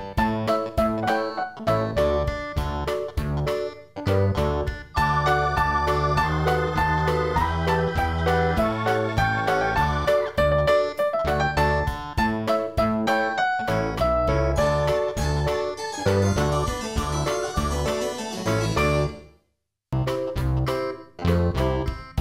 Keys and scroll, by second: 14.7 ctrl+i.